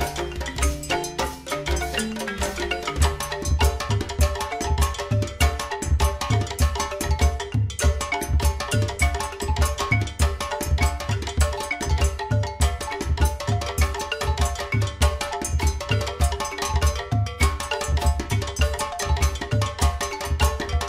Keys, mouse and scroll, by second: 2.4 click, 9.9 g, 17.4 click.